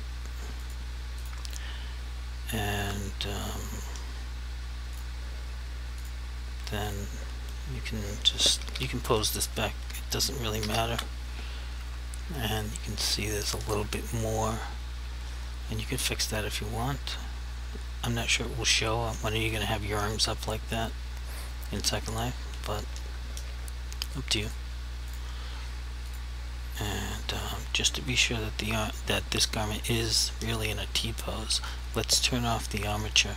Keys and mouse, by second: 0.7 click, 5.0 click, 8.8 a, 10.7 alt+r, 24.5 click.